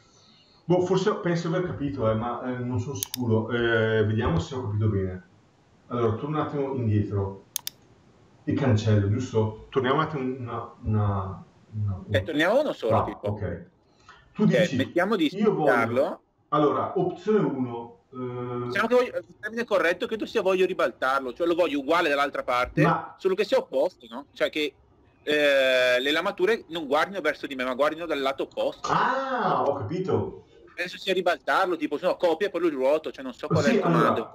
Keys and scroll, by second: 1.6 Escape, 4.0 Delete, 10.6 Delete.